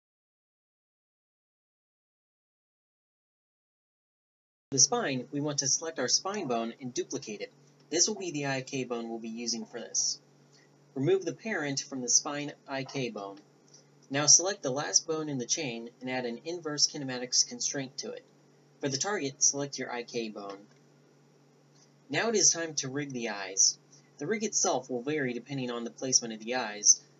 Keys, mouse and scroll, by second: 0.4 right click, 0.8 Tab, 1.0 a, 1.3 ctrl+h, 1.5 Tab, 2.2 ctrl+p, 2.4 a, 2.6 g, 3.6 a, 4.2 a, 5.8 Tab, 6.2 shift+d, 6.8 ctrl+alt+s, 8.3 drag, 8.6 click, 9.2 Tab, 9.8-10.5 middle drag, 10.7 middle click, 11.1 right click, 13.6-14.3 right drag, 15.1 Tab, 15.5 click, 16.9 click, 18.8 Tab, 18.8 click, 21.9 click, 24.3 right click, 25.1 Tab, 25.8 KP_1, 26.7 Tab.